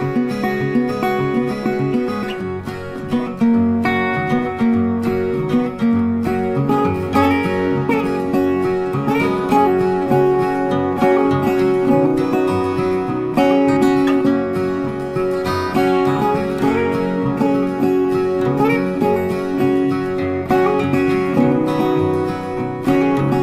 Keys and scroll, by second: 3.2 Delete, 4.6 ctrl+d.